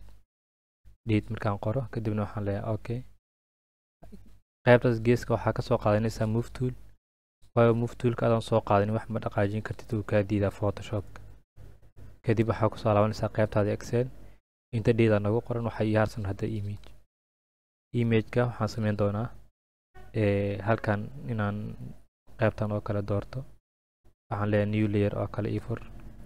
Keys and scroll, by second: 0.0-1.2 typing.